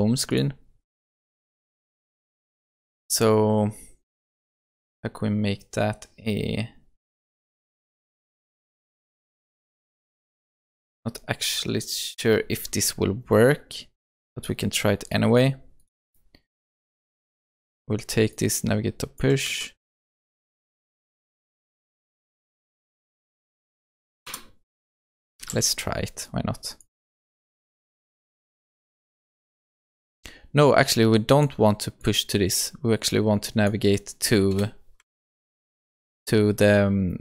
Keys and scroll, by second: 19.5 ctrl+c, 21.6 ctrl+v, 23.4 alt+Return, 25.4 ctrl+s, 35.2 ctrl+z.